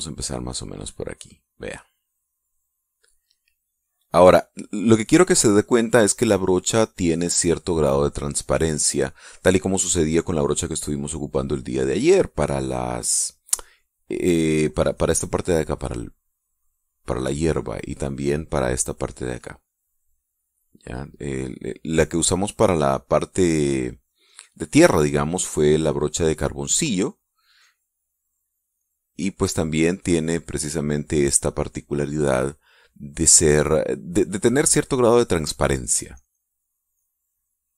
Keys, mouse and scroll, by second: 0.7-3.1 drag, 3.2-4.5 drag, 4.6-6.4 drag, 6.6-9.4 drag, 14.8 middle click, 17.4-18.7 drag, 20.2-33.0 drag, 33.1-37.4 drag, 37.5 click.